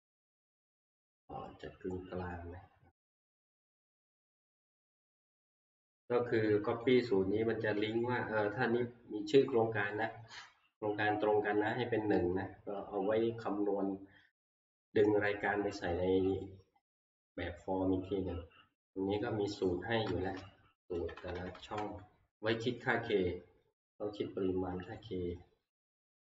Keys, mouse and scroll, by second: 5.7 click, 6.9 click, 7.8 click, 8.0 click, 12.1 Escape, 16.4 click, 17.3 click, 19.6 click, 20.9 Right, 21.1 Right, 21.3 Right, 21.6 Right, 21.8 Right, 25.0 click.